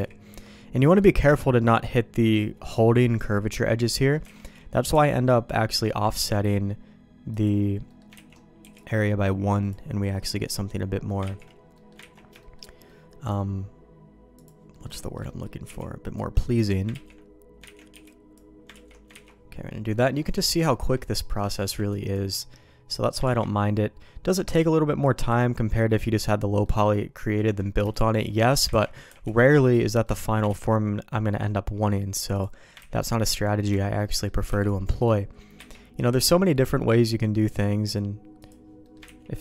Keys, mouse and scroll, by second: 0.3 ctrl+z, 0.8 middle click, 3.9 middle click, 4.3 alt+a, 4.7 middle click, 4.9 b, 6.1 ctrl+q, 7.4 click, 7.8 middle click, 8.1 ctrl+x, 8.6 b, 11.2 ctrl+q, 11.7 middle click, 12.0 ctrl+x, 12.4 shift+middle click, 12.8 middle click, 14.7 middle click, 15.0 shift+middle click, 15.2 middle click, 15.6 b, 16.3 middle click, 16.9 ctrl+q, 17.6 ctrl+x, 17.9 b, 18.7 ctrl+q, 19.1 ctrl+x, 19.8 middle click, 20.7 shift+middle click, 21.0 middle click, 21.6 b, 23.2 ctrl+q, 25.2 click, 25.7 middle click, 26.6 middle click, 27.1 middle click, 27.9 shift+middle click, 28.7 ctrl+x, 29.0 b, 30.0 middle click, 30.4 ctrl+q, 32.3 click, 32.7 ctrl+x, 33.0 middle click, 33.7 middle click, 34.0 middle click, 34.4 b, 35.5 ctrl+q, 37.0 middle click, 38.8 middle click, 39.0 ctrl+x.